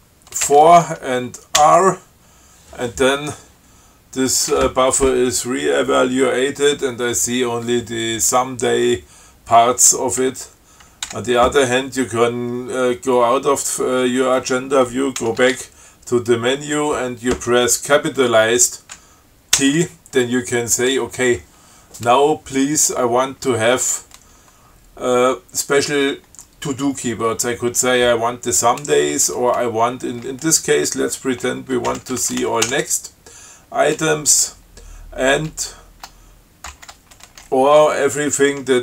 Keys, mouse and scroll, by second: 0.7 4, 1.9 r, 11.4 q, 15.5 ctrl+c, 15.8 ctrl+a, 19.9 shift+t, 31.9-33.4 typing, 37.0 alt+<.